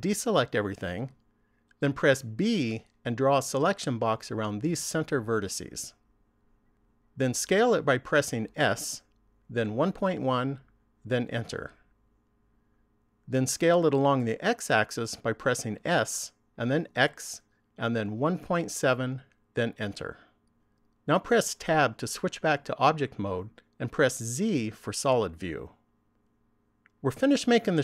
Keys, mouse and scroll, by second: 0.2 a, 2.8 b, 8.4 s, 15.2 s, 21.4 Tab, 24.1 z.